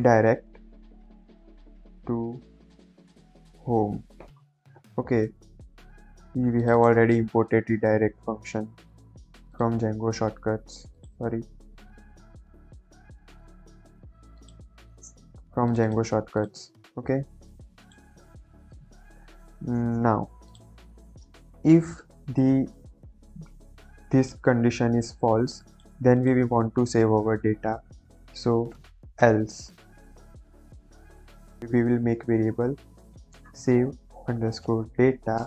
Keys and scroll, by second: 1.0 shift+9, 1.2 shift+0, 1.6 Left, 2.3-3.5 typing, 3.9 ctrl+s, 21.6 Return, 26.9 BackSpace, 27.8 Return, 28.9-29.8 typing, 30.1 Return, 32.6-35.4 typing.